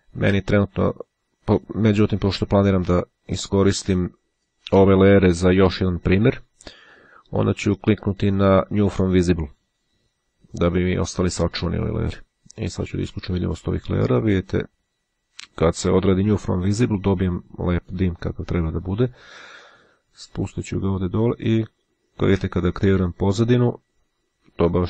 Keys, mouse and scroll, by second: 9.4 click, 11.8-13.3 drag, 14.7 click, 18.9-20.2 drag, 21.1 click.